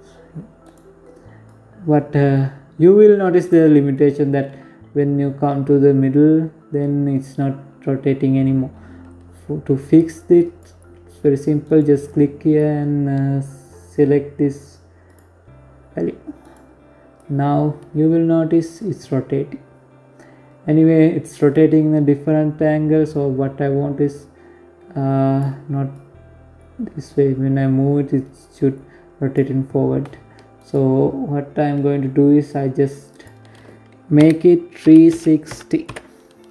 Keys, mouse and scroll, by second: 0.0 click, 2.5 click, 5.5 click, 10.2 right click, 13.6 click, 15.0 right click, 15.7 click, 24.5 click, 29.1 right click, 30.1-30.7 scroll down 4, 30.7 scroll up 1, 31.6 click.